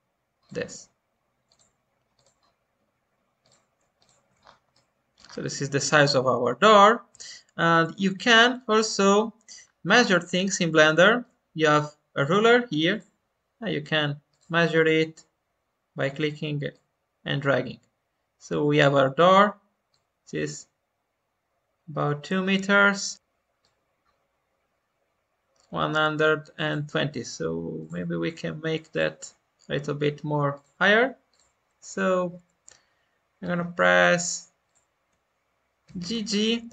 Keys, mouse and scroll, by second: 4.4 scroll down 1, 4.7 middle click, 5.2-5.8 scroll down 1, 6.0-7.7 middle drag, 8.1 alt+middle click, 9.3-9.8 scroll up 2, 10.0 shift+middle click, 10.4-10.7 scroll up 2, 10.9-12.8 shift+middle drag, 12.8 click, 14.2-19.7 drag, 19.8-22.9 drag, 23.1 Delete, 23.6-34.3 drag, 34.6-35.8 shift+drag, 35.8 g.